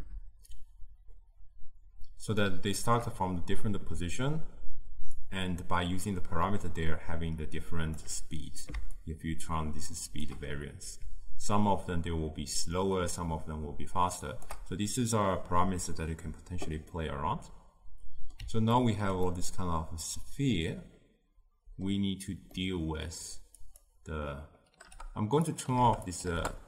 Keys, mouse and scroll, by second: 0.6-18.8 shift+drag, 18.8-24.9 ctrl+middle drag, 24.9-26.6 drag.